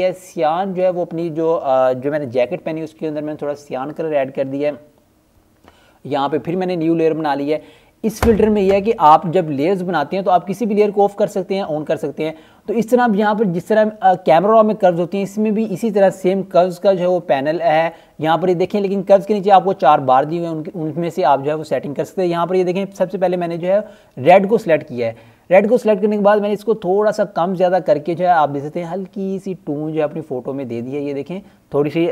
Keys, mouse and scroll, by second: 0.5 click, 3.9-4.8 scroll down 1, 4.8 right click, 5.6 click, 6.3 scroll down 1, 9.0 click, 13.3 click, 15.4-17.1 scroll up 1, 19.7-20.5 scroll up 1, 21.4 click, 24.4-25.3 scroll down 1, 25.3 click, 31.7 click.